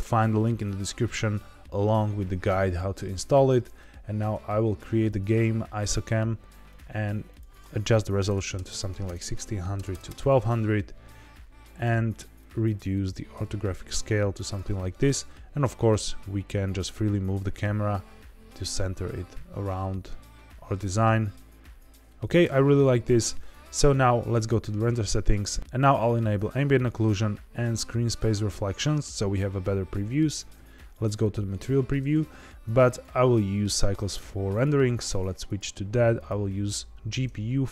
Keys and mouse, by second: 5.0-6.7 drag, 7.3-10.5 drag, 8.6 KP_0, 9.9 KP_0, 11.7 click, 12.4-14.5 drag, 14.9 g, 24.3 click, 26.7 click, 28.0 click, 30.5 z, 32.8-34.6 drag, 35.4-36.2 drag.